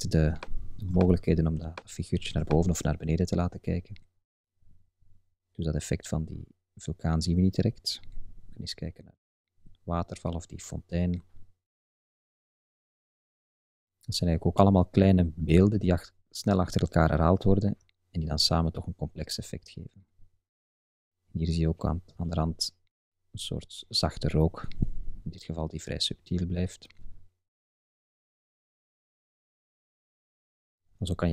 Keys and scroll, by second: 3.0 Up, 3.9 Right, 4.6 Up, 5.0 Right, 5.3 Up, 5.5 Right, 6.2 Up, 6.8 Right, 7.1 Up, 7.7 Left, 7.9 Up, 8.4 Right, 8.6 Up, 9.6 Left, 9.8 Up, 10.3 Left, 10.5 Up, 12.8 Right, 15.7 Down, 17.0 Left, 17.9 Up, 18.1 Right, 18.4 Up, 19.2 Right, 19.4 Up, 20.2 Right, 20.3 Up, 20.8 Left, 21.0 Up, 21.3 Left, 21.5 Up, 22.2 Left, 22.3 Up, 25.4 Left, 25.6 Up, 26.4 Right, 26.5 Up, 26.9 Left, 28.1 Up, 28.5 Left, 28.6 Up.